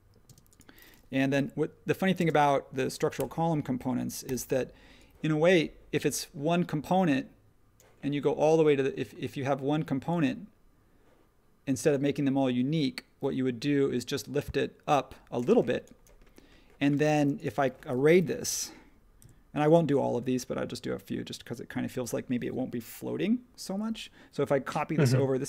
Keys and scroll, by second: 1.3 p, 3.2 Return, 4.2 p, 15.5 space, 17.0 space, 18.1 m.